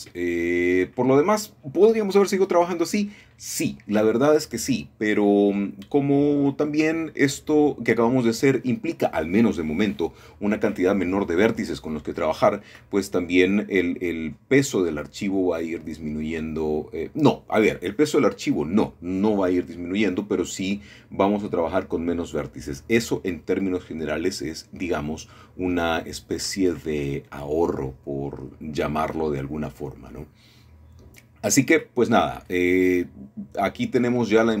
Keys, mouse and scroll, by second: 0.4 shift+click, 1.3-2.3 scroll down 2, 2.3-2.6 scroll down 1, 3.3 middle click, 3.9 scroll down 1, 6.4-7.0 scroll down 1, 7.0 shift+middle click, 7.8 shift+middle click, 11.6-12.6 scroll down 1, 13.3 click, 14.0-14.8 scroll up 2, 15.6 shift+click, 16.7 shift+click, 17.4-18.1 scroll down 2, 18.1 click, 18.1-18.7 scroll up 2, 19.3-20.6 scroll down 2, 19.5 click, 21.6-21.9 typing, 25.2 click, 26.6 click, 26.6 right click, 28.2 middle click, 28.6-29.2 scroll up 1, 29.6 shift+middle click, 29.8-30.4 scroll down 1, 31.0 shift+middle click, 31.5 shift+middle click, 32.3 middle click, 33.0 middle click, 33.4-34.6 shift+middle drag.